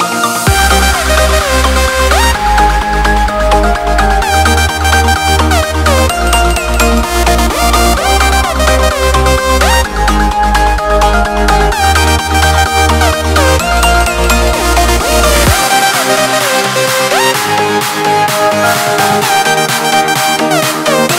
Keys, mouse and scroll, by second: 0.3 Escape, 2.5 Return, 3.6 click, 5.8 click, 6.6 Escape, 9.4 click, 11.0 click, 13.4 2, 13.8 0, 14.2 Return, 14.8 2, 15.2 0, 15.6 Return, 16.9 Escape, 19.0 click.